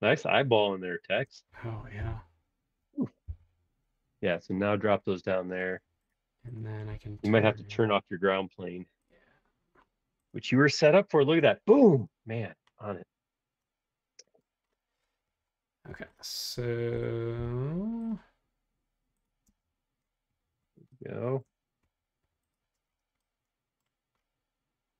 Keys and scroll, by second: 2.0 m, 3.2 Up, 4.6 shift+space, 17.3 r, 19.4 space, 22.2 Escape.